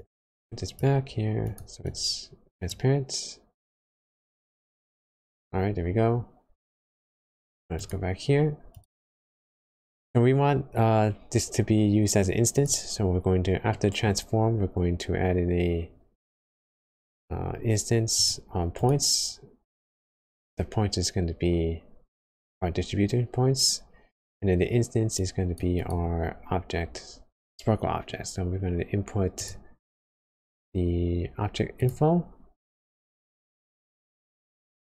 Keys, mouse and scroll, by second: 4.6 middle click, 7.7 click, 8.7 click, 13.0-13.7 scroll up 5, 13.7 middle click, 14.5 shift+a, 25.8 click, 34.5 middle click.